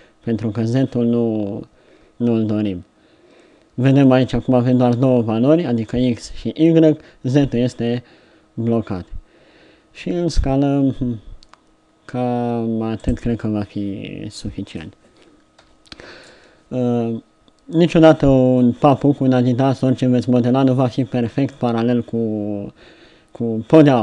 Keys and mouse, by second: 1.9 middle click, 5.6 middle click, 15.6 z, 19.2-24.0 middle drag.